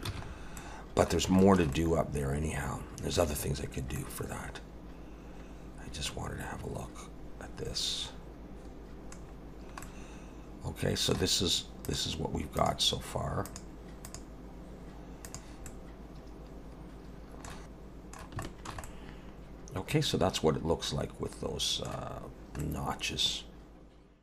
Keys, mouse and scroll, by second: 0.1 ctrl+s, 0.3 scroll up 3, 0.6 middle click, 1.4 shift+middle click, 1.7 middle click, 3.6 scroll up 2, 4.0 middle click, 9.2 scroll down 4, 9.8 middle click, 11.8 click, 15.7 middle click, 17.3 Tab, 17.3 alt+a, 17.3 middle click, 18.4 shift+middle click, 18.8 middle click, 22.3-22.6 scroll down 1, 22.6 middle click.